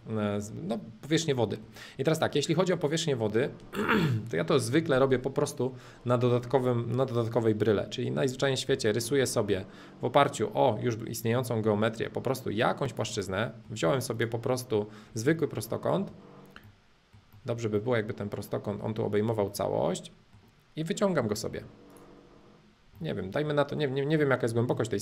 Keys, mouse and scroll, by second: 1.2 scroll down 2, 1.4-3.4 middle drag, 4.4-6.4 drag, 8.3 click, 8.7 r, 9.0 middle click, 9.5 click, 10.2 middle click, 10.3-12.3 drag, 12.9 click, 13.2 middle click, 13.8 space, 14.2 click, 15.1-17.4 middle drag, 17.8-19.8 middle drag, 21.5 p, 21.9-23.0 drag, 23.0-25.0 middle drag.